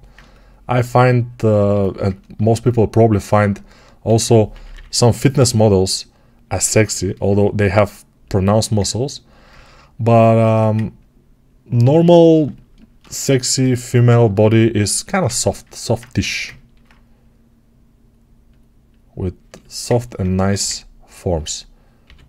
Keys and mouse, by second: 3.9 g, 4.4 ], 4.6 ], 6.4-13.4 alt+shift+drag, 10.3 1, 13.4-19.1 alt+right drag, 16.1 g, 19.1-22.2 alt+shift+drag, 20.2 1, 21.9 g.